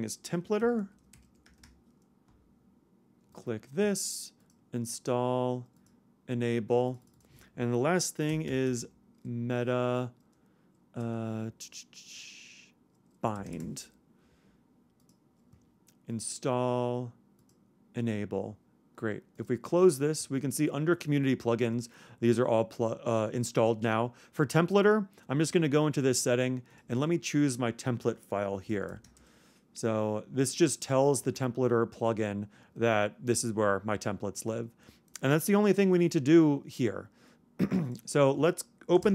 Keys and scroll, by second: 39.0 super+space.